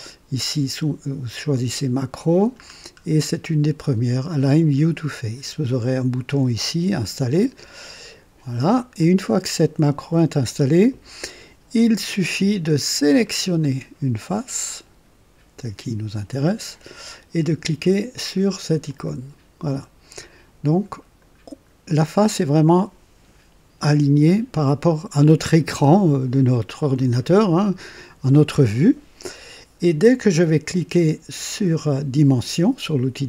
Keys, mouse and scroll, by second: 2.5-2.9 scroll down 2, 8.9 click, 12.9 click, 18.8 click, 20.8-21.5 scroll up 4, 21.8-22.6 right drag.